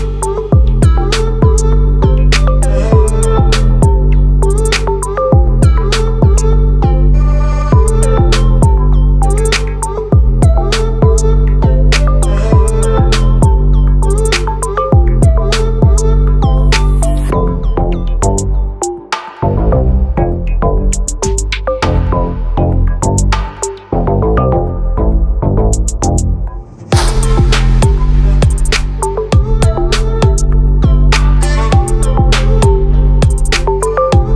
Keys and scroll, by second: 3.2 ctrl+t, 32.4 ctrl+BackSpace, 32.9 alt+BackSpace, 33.4 ctrl+d.